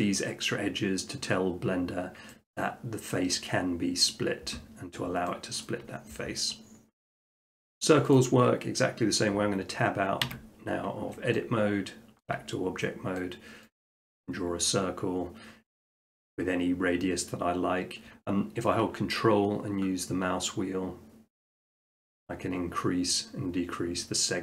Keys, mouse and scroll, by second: 1.4-2.3 scroll down 2, 2.6 middle click, 5.0 middle click, 5.7 shift+middle click, 8.1 click, 10.3 Tab, 12.2 shift+middle click, 12.3 middle click, 12.4 middle click, 13.2 middle click, 13.8 click, 19.1 click, 20.3 ctrl+middle click, 20.5 ctrl+middle click, 20.9-24.4 ctrl+scroll.